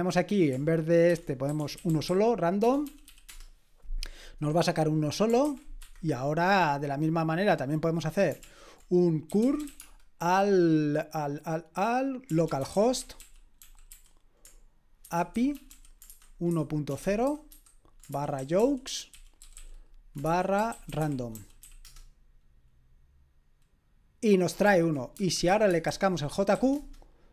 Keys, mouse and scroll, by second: 0.4 click, 0.9-3.5 typing, 4.8 click, 5.4 ctrl+c, 5.8 Escape, 6.9-8.0 drag, 8.4 ctrl+l, 9.1-10.1 typing, 12.3-13.9 typing, 15.0-21.8 typing, 24.7 ctrl+p, 25.1-26.5 typing, 26.7 Return.